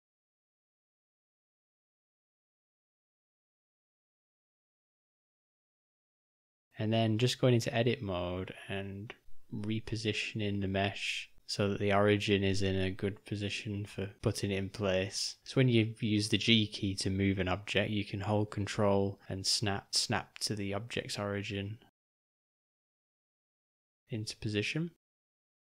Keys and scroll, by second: 1.9 a, 3.0 g, 6.5 Tab, 7.8 g, 9.9 s, 13.3 d, 14.2 o, 14.2 s, 19.2 alt+d, 20.2 s, 21.8 g, 22.9 ;, 24.8 r.